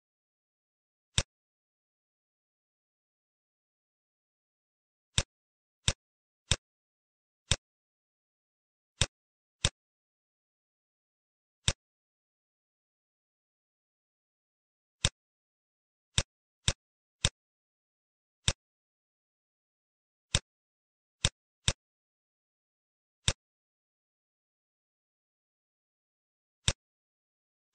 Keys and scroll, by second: 4.2 ctrl+z, 8.4 ctrl+z, 13.4 space, 22.9 t, 24.1 shift+l, 24.4 i, 24.6 k, 24.9 e.